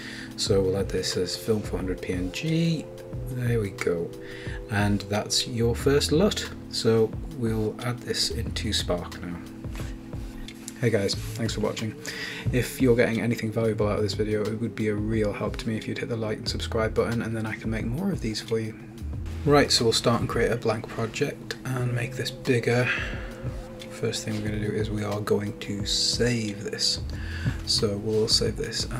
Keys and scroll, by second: 0.0-1.0 typing, 2.5 Return.